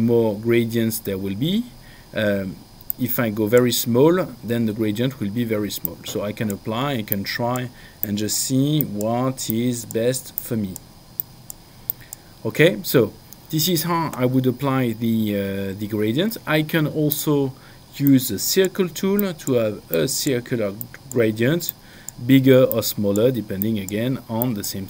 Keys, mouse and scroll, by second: 2.9 click, 5.8 click, 7.1 click, 17.1 click, 19.2 click, 22.7 click.